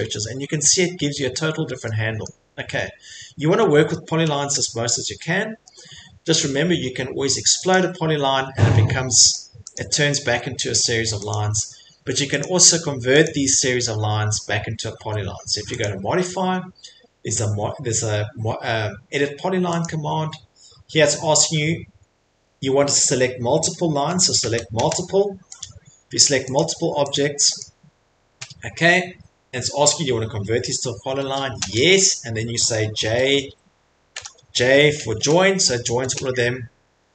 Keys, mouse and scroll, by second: 0.2 middle click, 0.3 middle click, 0.5 middle click, 2.2 middle click, 2.7 middle click, 4.1 scroll, 7.7 click, 9.0 Escape, 9.3 click, 9.7 click, 10.3 Escape, 10.8 click, 11.3 click, 11.5 Escape, 12.4 click, 13.2 click, 14.9 Escape, 15.8 click, 19.9 click, 21.0 click, 24.4 m, 25.6 click, 26.6 click, 27.6 click, 28.3 y, 33.4 h, 34.1 BackSpace, 36.0 BackSpace, 37.0 BackSpace.